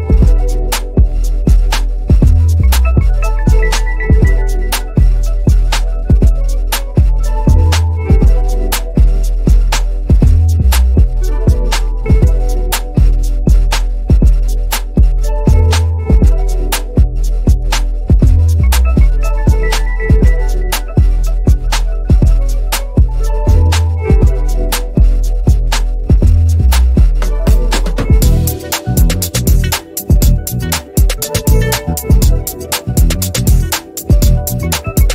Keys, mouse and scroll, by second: 0.2 shift+c, 5.9-8.3 drag, 8.9 shift+m, 9.9 click, 10.8 ctrl+scroll up 1, 13.5 r, 13.9 click, 15.1 v, 15.5 click, 16.5 ctrl+c, 16.6 click, 17.1 ctrl+alt+v, 19.1 click, 21.1 Left, 23.7 ctrl+z, 24.0 click, 24.8 r, 25.2 click, 25.9 v, 26.3-34.0 shift+drag, 34.0 click, 34.8 ctrl+scroll down 1.